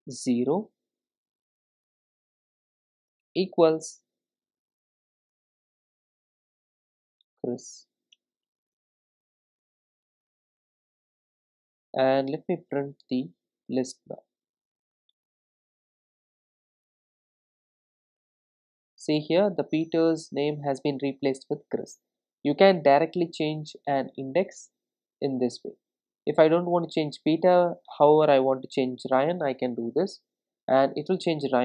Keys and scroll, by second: 13.7 Return, 16.9 ctrl+r, 30.2 ctrl+r.